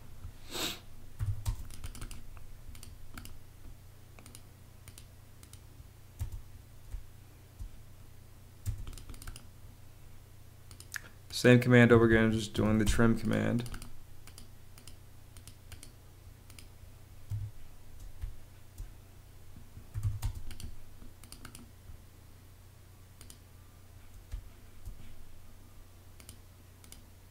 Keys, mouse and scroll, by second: 0.8-1.7 typing, 6.1 space, 8.5 space, 11.8 Escape, 12.2-13.0 typing, 17.2 Escape, 18.1 space, 19.6-20.4 typing, 24.2 space.